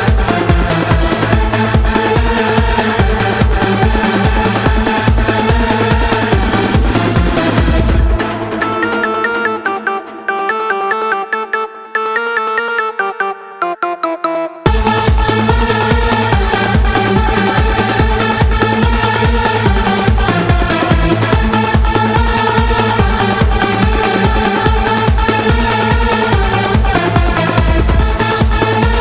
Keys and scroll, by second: 13.8 0, 16.2 shift+3, 17.4 shift+w, 19.2 x.